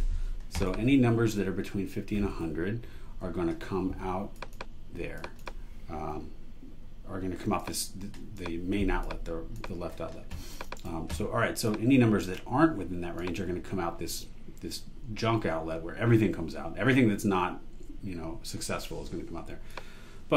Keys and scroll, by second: 2.9 i, 10.8 super+e.